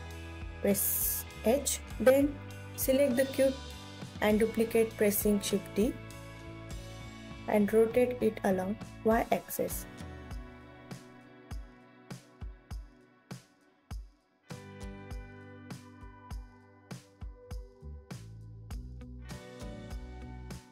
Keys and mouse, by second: 1.0 shift+d, 2.5 click, 3.7 r, 5.1 y, 5.6 KP_9, 6.0 KP_0, 7.1 Escape, 7.8 r, 8.4 z, 8.9 KP_9, 9.2 KP_0, 9.8 click, 11.4 click, 13.9 g, 18.6 click, 19.0 KP_3.